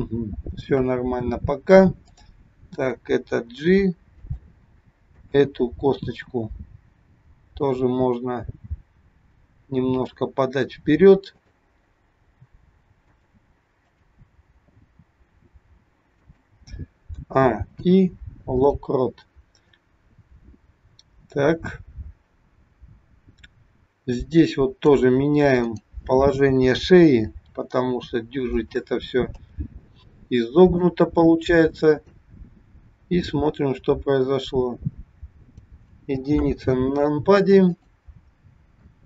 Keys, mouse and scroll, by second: 2.0 click, 3.5 g, 5.1 click, 6.1 click, 7.1 g, 11.2 click, 12.3 g, 14.0 click, 15.0 g, 17.1 a, 17.9 i, 19.9 click, 25.6 click, 27.3 r, 29.5 a, 30.0 i, 32.0 click, 33.2 click, 36.5 KP_1, 37.7 click, 38.4-38.8 scroll down 1, 38.8 shift+middle click.